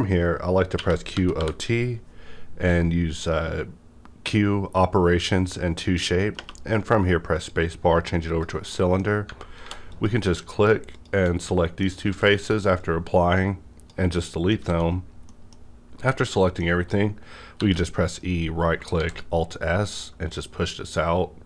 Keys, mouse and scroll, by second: 0.7-1.3 typing, 6.3 typing, 7.3 click, 8.2 click, 8.7 middle click, 9.2 Tab, 9.5 3, 9.8 click, 10.3 middle click, 10.3 middle click, 10.9 shift+click, 11.5-12.7 middle drag, 11.5 shift+click, 12.0 x, 12.7-14.6 drag, 14.2 middle click, 14.6 a, 15.2 middle click, 16.3 middle click, 17.5 e, 18.1 right click, 18.9 alt+s.